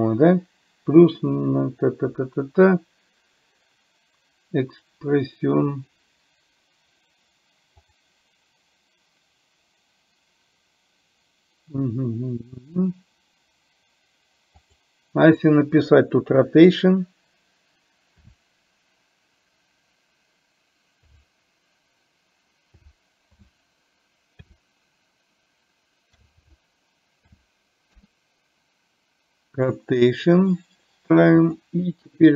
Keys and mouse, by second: 31.5 click.